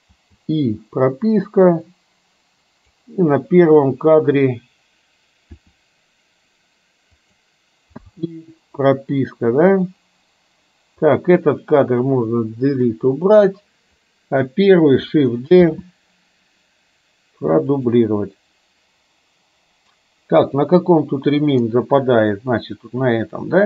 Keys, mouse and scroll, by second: 0.4 i, 1.7-3.1 drag, 5.7 r, 8.1 i, 10.0 click, 11.2 click, 13.0 Delete, 14.0-14.5 drag, 15.7 shift+d, 20.5 click.